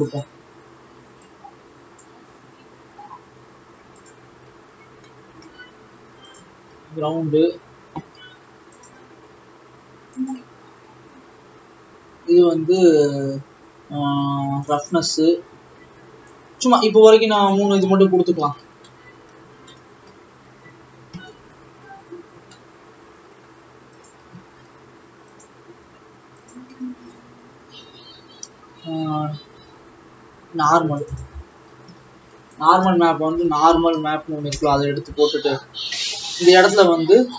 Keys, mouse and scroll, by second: 2.4 click, 4.9-5.2 scroll down 3, 5.3-6.4 middle drag, 6.4 click, 7.1 shift+d, 14.9 click, 18.0 click, 18.1-18.5 scroll down 2, 21.6-24.2 middle drag, 24.2 click, 24.8 shift+d, 31.2 click, 32.1 shift+a.